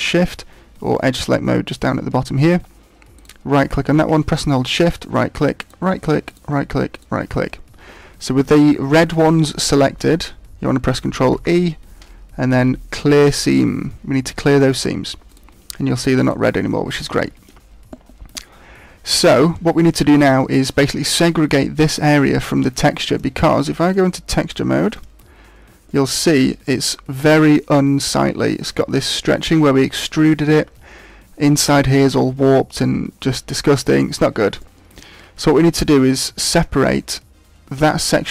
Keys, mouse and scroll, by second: 0.9 click, 3.1 right click, 4.8 shift+right click, 5.5 shift+right click, 6.2 shift+right click, 6.9 shift+right click, 11.3 ctrl+e, 15.2 right click, 15.9 right click, 16.2 right click, 17.2 shift+middle click, 17.8 middle click, 23.0 middle click, 23.9 click, 24.4 click, 25.4-25.8 scroll down 2, 25.8 middle click, 32.8-33.5 scroll up 5, 33.5 middle click, 34.5 middle click, 35.6 middle click, 36.3 middle click.